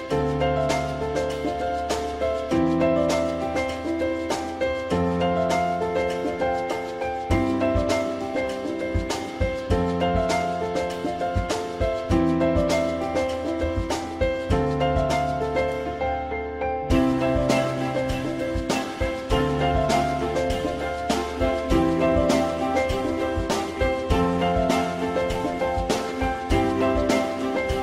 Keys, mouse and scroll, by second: 5.8 alt+middle click, 14.2 ctrl+click, 16.6 alt+middle click, 19.4 ctrl+click, 23.2-23.9 typing.